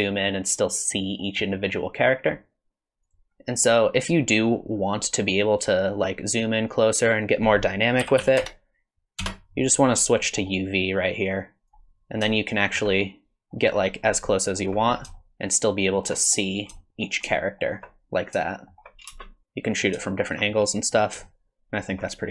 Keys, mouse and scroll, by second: 7.3 click, 10.2 middle click, 10.9 click, 12.3 shift+middle click, 13.0 middle click, 13.8-14.3 scroll up 7, 14.3 shift+middle click, 14.8 scroll up 2, 15.1 shift+middle click, 16.5 scroll up 1, 16.8 shift+middle click, 17.0 scroll up 1, 17.3 shift+middle click, 18.5 shift+middle click, 19.1 space, 19.4 middle click, 19.4 scroll down 3, 20.1 shift+middle click, 20.5 middle click, 21.3 shift+middle click.